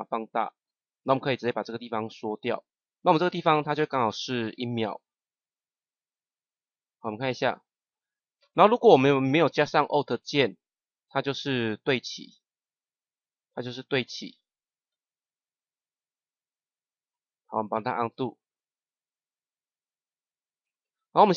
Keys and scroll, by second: 9.0 [, 18.0 [.